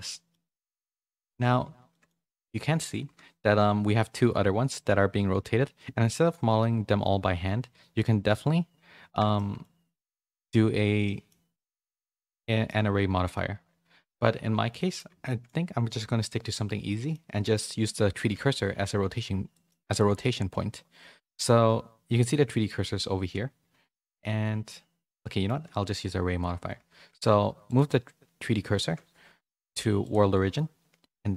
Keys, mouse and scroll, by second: 0.7 a, 0.9 middle click, 1.9 shift+middle click, 3.0 KP_1, 9.3 shift+middle click, 11.0 middle click, 11.8 middle click, 14.5 a, 14.7 middle click, 15.2 shift+middle click, 16.8 middle click, 18.3 shift+s, 19.5 middle click, 25.2 middle click, 26.9 shift+s, 31.1 middle click.